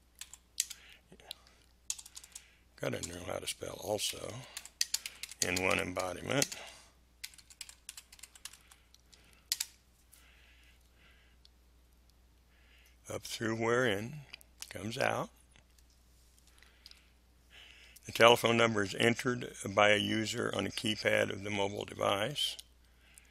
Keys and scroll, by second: 0.0-0.5 typing, 1.8 BackSpace, 3.8-9.5 typing, 16.8 Delete.